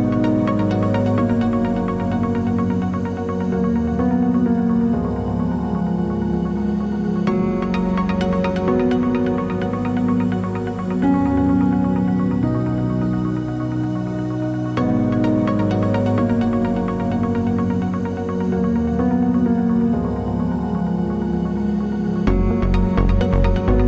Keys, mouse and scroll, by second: 0.7 click, 1.1 Tab, 1.2 scroll down 2, 1.5 ctrl+s, 3.0-4.3 scroll down 1, 4.3 middle click, 4.5 shift+middle click, 4.7 scroll up 1, 4.9 shift+middle click, 5.4 click, 5.6 Tab, 5.9 middle click, 6.4 KP_Divide, 6.7-7.0 scroll up 1, 7.0 shift+middle click, 7.5 middle click, 7.9 click, 8.1 3, 8.3 click, 8.4 middle click, 10.5 middle click, 10.5 g, 10.6 click, 10.7-13.0 middle drag, 11.4 KP_3, 11.6 z, 11.9-12.4 scroll up 2, 12.4 r, 13.0 click, 14.5 middle click, 14.6 scroll down 2, 14.8 Tab, 15.0 z, 15.3 middle click, 16.1 KP_Divide, 16.1-22.3 middle drag, 16.7 scroll down 1, 19.9 click, 21.7 Tab, 22.0 click, 22.3 shift+click, 23.2 scroll down 1, 23.4 shift+middle click.